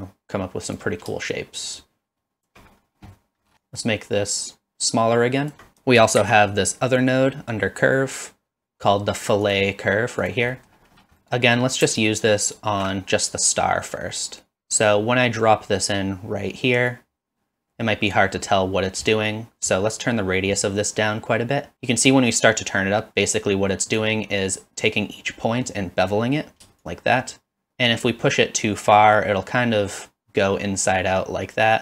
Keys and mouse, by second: 1.4-2.5 shift+drag, 3.5 ctrl+shift+x, 3.8-5.6 shift+drag, 5.7 ctrl+s, 6.2 shift+a, 10.5 middle click, 11.3 middle click, 12.5 alt+shift+click, 15.0-16.9 drag, 19.3-21.7 shift+drag, 22.3-24.0 shift+drag, 26.9-31.8 shift+drag.